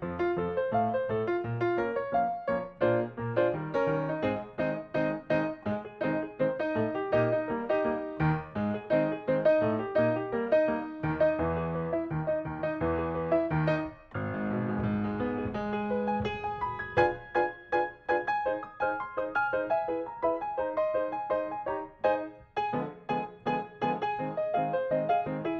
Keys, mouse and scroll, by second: 1.8 Delete, 2.0 middle click, 3.0 click, 4.0 Delete, 4.2 middle click, 5.1 click, 5.6 click, 6.2 Delete, 6.5 middle click, 7.8 scroll up 1, 8.1 click, 9.5 ctrl+click, 12.4 ctrl+click, 12.7 middle click, 13.4 click, 15.2 ctrl+click, 16.8 ctrl+click, 17.1 middle click, 17.7 click, 18.8 ctrl+click, 20.5 middle click, 21.2 click, 22.4 ctrl+click, 24.6 middle click, 25.3 scroll down 1.